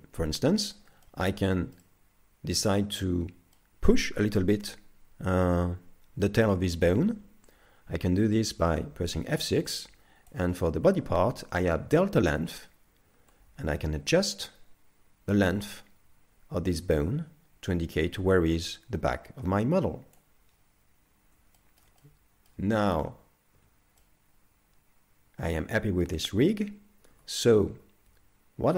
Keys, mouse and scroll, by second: 0.8-1.3 scroll up 2, 1.1 middle click, 1.8 middle click, 3.6 middle click, 8.5 F6, 21.6 shift+middle click, 22.0 middle click, 22.8 shift+middle click, 23.6 z, 24.0 middle click, 27.3 2.